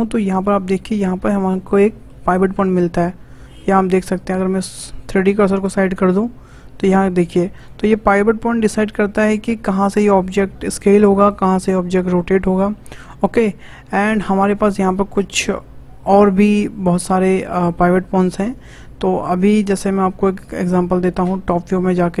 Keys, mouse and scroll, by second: 1.1-1.8 scroll up 7, 1.8-4.9 shift+middle drag, 5.2-7.5 shift+right drag, 7.5 click, 8.3-8.6 scroll down 3, 8.8 s, 11.7 r, 14.1-15.1 shift+middle drag, 15.1-19.5 shift+drag, 19.5-20.4 scroll down 6, 21.7-22.2 shift+middle drag.